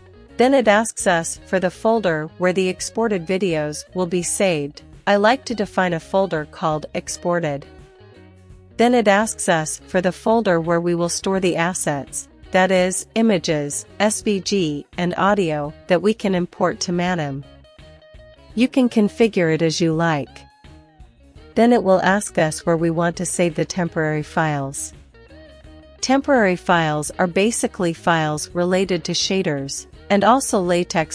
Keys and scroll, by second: 1.3 Return, 3.4-7.1 typing, 7.7 Return, 11.6-12.6 typing, 13.6-20.3 typing, 14.9 Return, 18.0 Return, 20.7 Return, 22.6-24.6 typing.